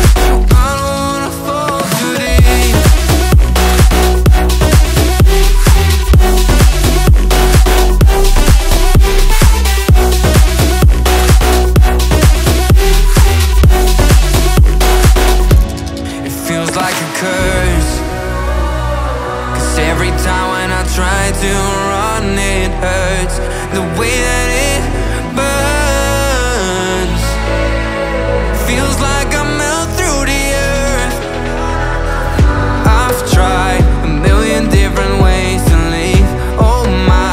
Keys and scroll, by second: 1.6 alt+Left, 5.1 alt+x, 5.8 Left, 7.5 shift+s, 8.5 Page_Down, 9.3 shift+m, 10.4 shift+l, 12.0 shift+x, 12.3 Escape, 13.1 Right, 13.3 BackSpace, 13.5 shift+l, 13.7 Escape, 26.6 ctrl+z, 27.6 ctrl+z, 28.7 ctrl+g.